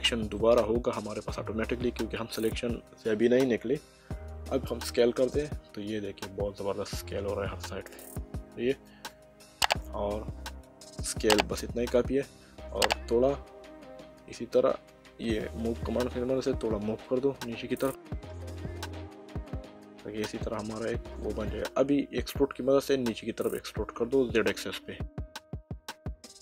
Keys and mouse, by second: 0.4 middle click, 4.8 s, 8.8 click, 9.5 middle click, 14.9 click, 22.7 e, 24.9 z.